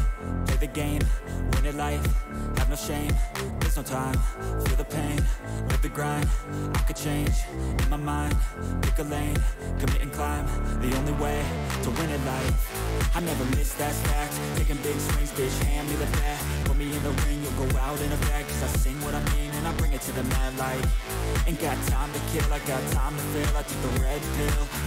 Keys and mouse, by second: 1.2 click, 4.0-5.4 drag, 8.3 click, 10.7 click, 12.3 right click, 13.1 click, 15.8-18.6 drag, 19.0 click, 19.6 click, 20.4 click, 22.6-24.3 drag.